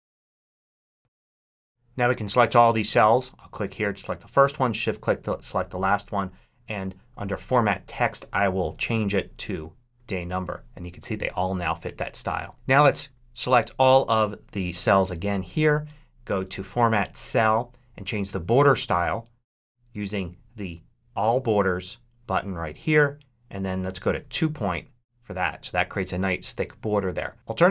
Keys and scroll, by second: 0.0-1.3 typing.